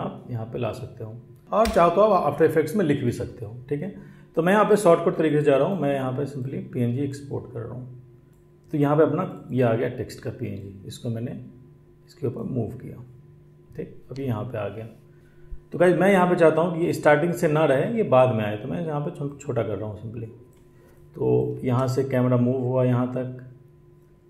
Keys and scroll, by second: 21.4 space.